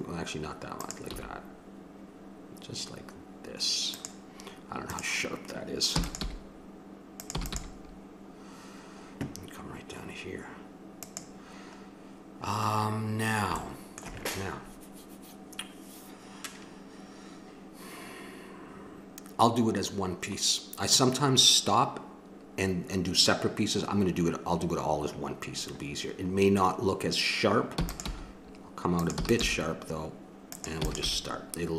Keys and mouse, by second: 0.8 right click, 1.1 g, 4.9-6.6 drag, 5.9 e, 6.2 g, 7.3 e, 7.5 g, 12.1 click, 12.7 middle click, 13.9-19.3 middle drag, 19.6 middle click, 27.8 e, 28.1 g, 29.1 e, 29.4 g, 30.8 e, 31.1 g.